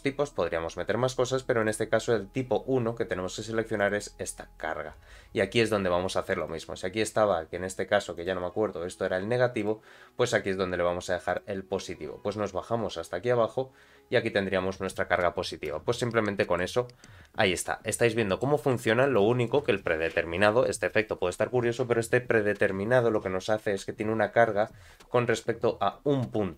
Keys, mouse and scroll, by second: 1.6-3.8 drag, 6.4 click, 8.1 click, 9.6 click, 11.3 click, 11.8 scroll down 2, 14.3-15.3 scroll down 6, 15.7 scroll down 1, 15.7 space, 16.0 middle click, 17.6 middle click, 18.8 shift+middle click, 19.2 space, 19.4 middle click, 20.1 scroll down 1, 20.4 space, 25.7 scroll up 2.